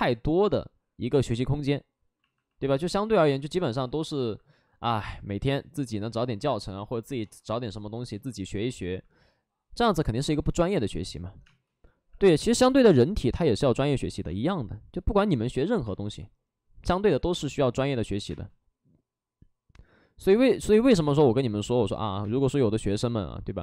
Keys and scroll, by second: 0.8 ctrl+z, 1.3 ctrl+d, 5.0 space, 5.3 space, 11.3 space, 14.2 space, 15.7 space, 17.2 space, 18.0 space, 18.1 x, 20.9 space, 22.1 space.